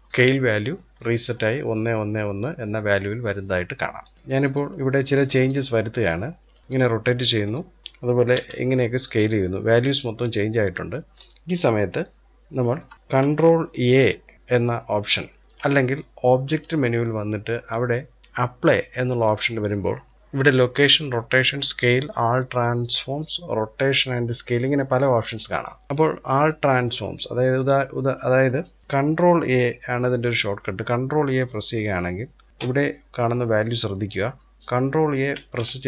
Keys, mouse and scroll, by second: 0.1-2.5 middle drag, 3.5-3.9 scroll down 2, 3.9 middle drag, 4.1 click, 4.7 click, 5.4 click, 7.1 click, 7.9 s, 10.3 middle click, 10.9 scroll down 1, 11.7-14.3 shift+middle drag, 16.1-18.6 drag, 34.9 ctrl+a.